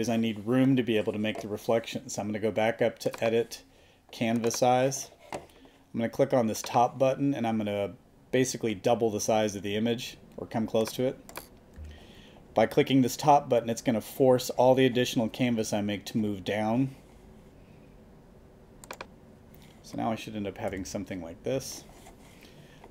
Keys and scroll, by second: 11.8 5, 20.7 super+-.